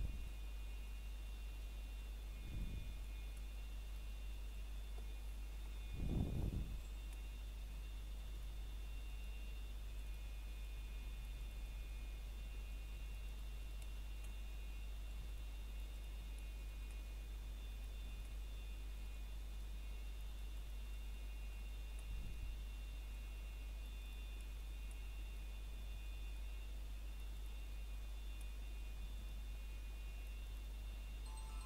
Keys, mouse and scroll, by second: 0.0 shift+middle click, 0.3 scroll up 1, 0.9 middle click, 1.1 scroll up 1, 1.4 middle click, 3.2 scroll down 1, 3.6 middle click, 3.9 scroll up 1, 4.2 shift+middle click, 4.7-5.8 scroll up 1, 6.1 middle click, 8.0 a, 9.0 ctrl+right click, 12.2 middle click, 12.7 scroll down 1, 13.0 middle click, 13.9 scroll up 1, 15.3 middle click, 16.1 scroll up 1, 16.5 middle click, 17.1 alt+click, 18.9 scroll down 1, 19.3 middle click, 19.6 scroll up 1, 20.0 middle click, 20.3 scroll up 1, 20.8 middle click, 21.1 scroll up 1, 22.0 middle click, 22.3 scroll down 1, 22.7 middle click, 23.1 scroll up 1, 23.9 middle click, 24.8 scroll down 1, 25.1 shift+middle click, 26.2 scroll up 1, 28.1 shift+scroll up 1, 28.2 shift+middle click, 29.4 click.